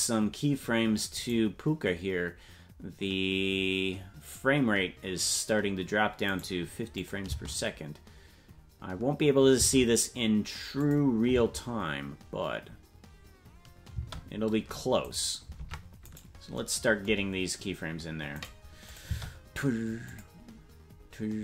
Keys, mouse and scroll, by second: 1.2-2.4 right drag, 6.3 right click, 7.0 click, 7.2 space, 10.8 click, 11.3 space, 14.6 space, 15.1 right click, 15.6 ctrl+Tab, 16.2 right click, 18.4 right click, 18.9-19.9 drag, 19.0 space, 20.1 click.